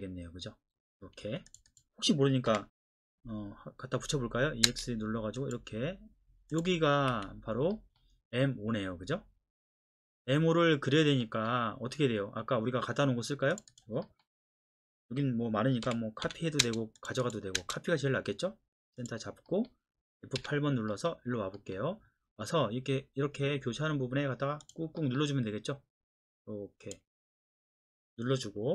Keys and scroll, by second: 1.2 Escape, 2.5-2.9 typing, 4.6 space, 7.1 Escape, 15.8-17.6 typing, 20.4 F8.